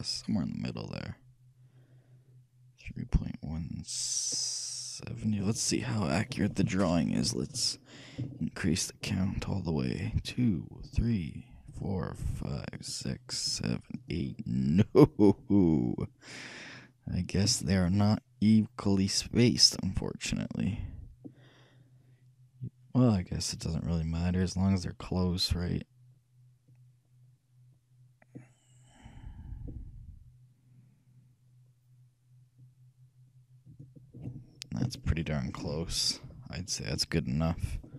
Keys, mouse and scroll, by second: 6.0 middle click, 8.5-9.5 shift+middle drag, 10.9-14.7 shift+drag, 14.7-16.5 middle drag, 18.0-19.7 shift+drag, 35.0-36.7 shift+middle drag.